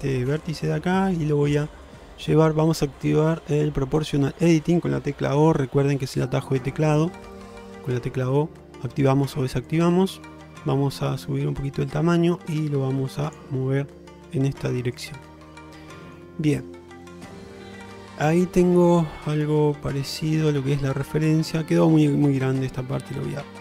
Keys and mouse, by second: 4.1 click, 5.8-7.6 typing, 9.0 o, 9.9-13.4 drag, 14.7 o, 15.0 click, 15.6 middle click, 17.1 click, 17.6 shift+middle click, 17.9-21.9 middle drag, 22.7 ctrl+z.